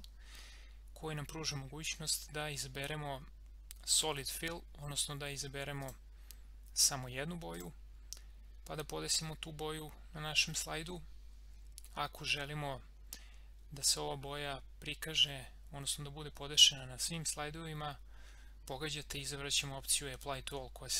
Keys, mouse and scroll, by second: 5.8 click.